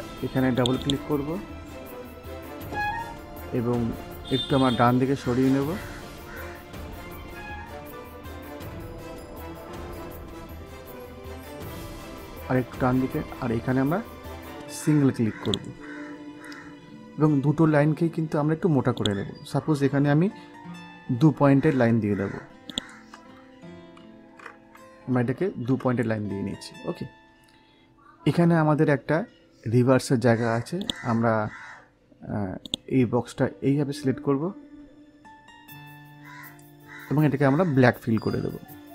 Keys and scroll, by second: 23.9 F12, 25.1 2, 25.6 Return.